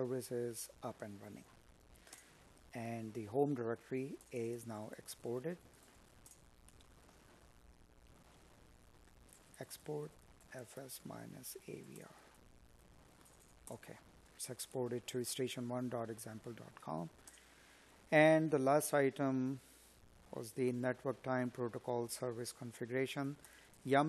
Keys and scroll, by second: 0.1 space, 2.7 Up, 13.0 space, 13.9 space, 20.3 space.